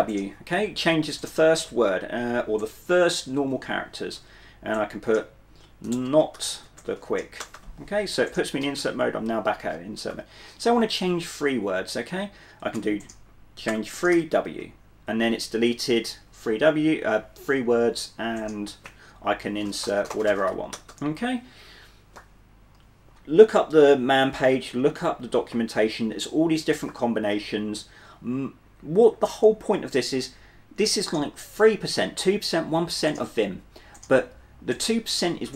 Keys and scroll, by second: 0.0 w, 5.8-7.6 typing, 10.2 typing, 12.9-15.6 typing, 19.5-21.5 typing.